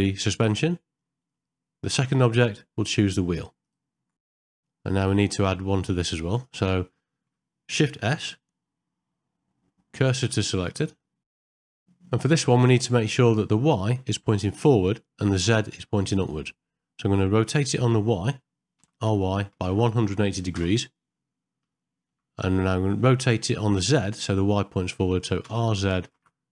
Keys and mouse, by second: 4.4 middle click, 6.3 click, 8.1 shift+s, 11.3 middle click, 11.5 ctrl+middle click, 11.7 shift+middle click, 11.8 middle click, 18.8 r, 21.8 ctrl+middle click.